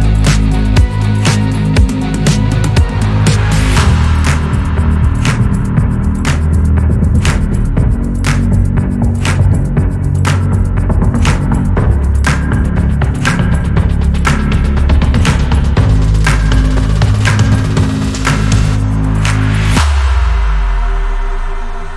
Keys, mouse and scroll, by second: 0.6 g, 5.4 Tab, 5.6 scroll down 2, 5.6-7.0 middle drag, 7.0 scroll up 2, 7.4 Tab, 7.9 click, 8.6 click, 9.6 ctrl+z, 10.2 middle click, 10.5 g, 13.8 middle click, 14.6 click, 14.9 g, 16.9-18.3 middle drag, 18.3 click, 18.6 g, 19.6 Tab, 19.8 scroll down 2, 19.9-21.2 middle drag, 21.2 scroll up 1.